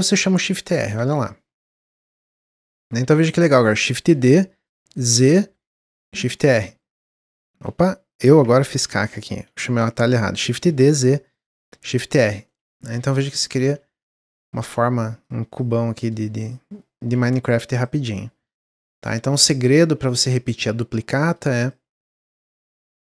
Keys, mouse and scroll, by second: 0.0-1.4 typing, 0.4-0.9 scroll down 4, 1.9 click, 2.9-3.9 shift+middle drag, 3.9 shift+d, 6.4 shift+d, 9.1 ctrl+z, 9.4 ctrl+z, 10.4 shift+d, 11.9 shift+r, 12.4-12.9 middle drag, 12.9-13.3 scroll down 3, 13.4-13.7 shift+r, 13.9 shift+r, 14.2-14.6 shift+middle drag, 14.6 click, 15.5-17.1 drag, 17.1 x, 18.1-18.5 scroll down 1, 18.5 shift+middle drag, 18.7-19.3 scroll up 5, 19.3-19.7 shift+middle drag, 19.7-20.0 shift+scroll up 1, 20.0 shift+middle drag, 20.2-20.7 shift+scroll up 3, 21.2 click, 21.6 click, 22.7-23.0 drag.